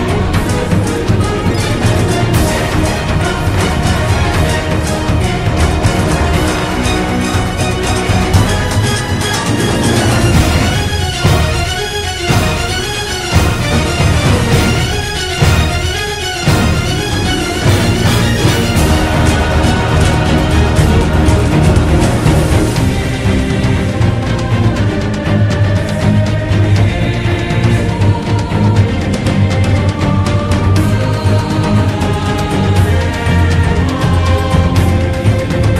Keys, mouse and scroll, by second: 0.9 right click, 1.3 b, 1.5 right click, 2.7 ctrl+z, 4.3 b, 5.6 b, 6.5 right click, 7.0 ctrl+=, 8.1 ctrl+z, 10.5 b, 11.1 ctrl+z, 11.9 ctrl+z, 12.1 right click, 15.1 ctrl+z, 15.6 ctrl+z, 18.9 b, 19.1 ctrl+-, 24.2 ctrl+=, 25.1 right click, 26.1 ctrl+z, 26.6 ctrl+z, 27.3 b, 29.4 ctrl+z, 33.9 ctrl+z.